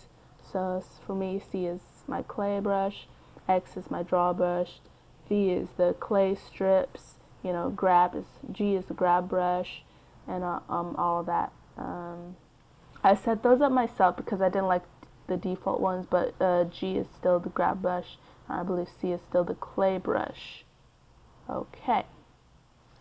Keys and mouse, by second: 1.4 x, 3.1 v, 6.3 g, 9.0 d, 10.6 c, 13.6-15.1 drag, 22.1-23.0 middle drag.